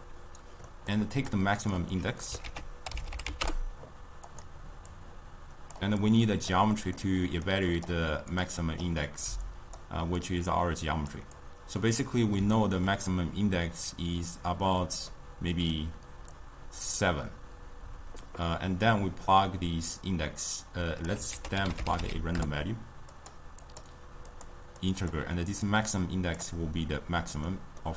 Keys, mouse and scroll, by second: 0.7-1.3 middle drag, 1.3 click, 2.0 middle click, 2.5 ctrl+a, 4.9-6.2 drag, 6.8-7.6 middle drag, 7.6 click, 8.5-9.3 drag, 10.2-11.5 drag, 12.0-16.3 middle drag, 16.3-19.6 drag, 21.5 ctrl+a, 23.6-27.5 drag, 27.5 middle click.